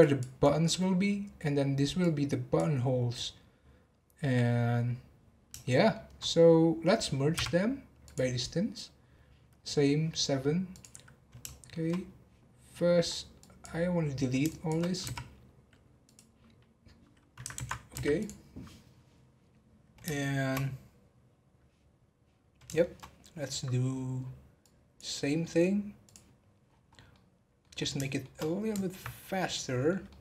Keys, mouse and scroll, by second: 0.0 click, 0.4 click, 2.0 click, 5.6-7.3 shift+middle drag, 7.3 m, 10.7 click, 11.4 shift+middle click, 11.8 shift+scroll up 1, 11.9 scroll down 2, 12.7 scroll down 1, 13.0 scroll up 2, 13.3 click, 14.4 shift+click, 15.0 x, 17.5 ctrl+z, 17.9 x, 19.5 scroll down 2, 20.1-22.4 shift+middle drag, 22.4 scroll up 1, 22.7 shift+middle click, 23.3 scroll down 4, 24.1-24.6 scroll up 1, 24.6 click, 26.0 click, 26.7-27.1 scroll down 3, 27.1 middle click, 27.8 scroll down 1, 28.0-29.2 shift+middle drag, 29.2-29.5 scroll down 4, 29.5-30.2 middle drag.